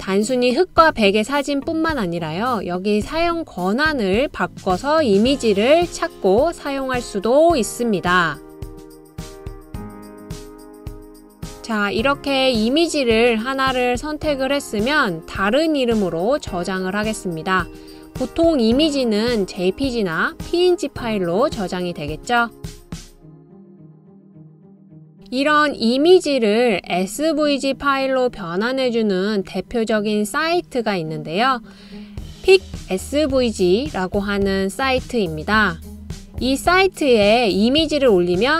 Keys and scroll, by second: 7.8 typing.